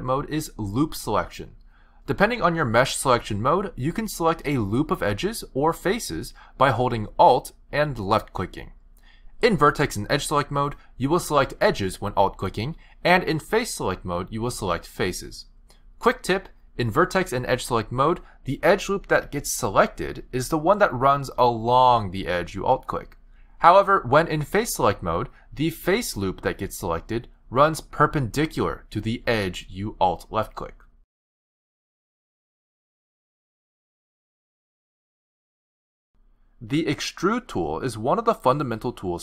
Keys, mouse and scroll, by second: 4.1 click, 4.5 click, 5.1 click, 5.7 click, 7.7 alt+click, 9.8 z, 10.7-11.5 scroll up 6, 11.4 middle click, 13.1 click, 13.7 click, 14.8 alt+click, 15.9 alt+click, 16.5 middle click, 17.5 z, 18.1 middle click, 21.1 click, 22.7 alt+click, 23.3 middle click, 23.9 alt+click, 24.4 middle click, 25.5 click, 26.3 click, 27.3 click, 28.4 alt+click, 29.3 alt+click.